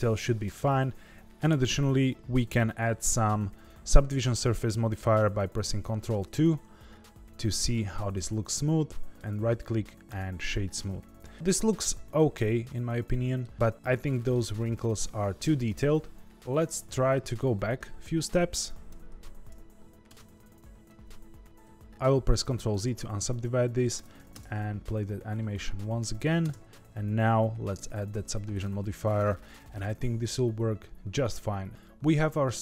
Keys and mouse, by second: 1.3 space, 5.9 ctrl+2, 6.7-7.7 middle drag, 8.1-9.1 middle drag, 9.2 right click, 10.8-11.3 middle drag, 11.3-13.4 middle drag, 13.9-14.3 middle drag, 15.0-15.5 middle drag, 16.9 ctrl+z, 18.3 click, 19.3 ctrl+z, 20.2 ctrl+z, 20.4 ctrl+z, 20.8 ctrl+z, 21.6 ctrl+z, 22.5 ctrl+z, 23.9 Tab, 24.3 space, 26.4 space, 27.8 ctrl+2, 28.6 right click, 29.5-31.7 middle drag, 31.7-32.4 middle drag.